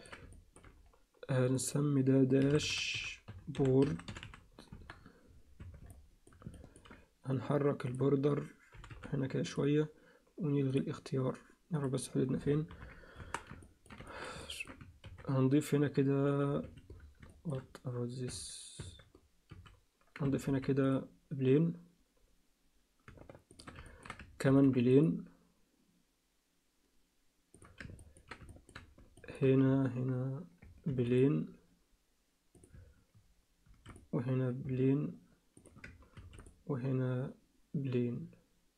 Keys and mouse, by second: 0.3 alt+shift+click, 1.6-4.9 drag, 5.6 Tab, 5.9 alt+middle click, 6.5 ctrl+alt+middle click, 7.9 click, 10.7 click, 10.7 g, 12.7 ctrl+KP_1, 13.2 Tab, 13.6 ctrl+alt+middle click, 14.1 shift+middle click, 14.4 ctrl+alt+middle click, 15.0 ctrl+r, 17.3 alt+shift+middle click, 18.3 Tab, 18.8 Tab, 19.5 a, 20.4 ctrl+r, 23.9 ctrl+alt+middle click, 24.4 ctrl+r, 28.0 ctrl+alt+middle click, 28.5 alt+shift+middle click, 29.2 ctrl+alt+middle click, 30.9 ctrl+r, 33.7 ctrl+r, 36.2 ctrl+r.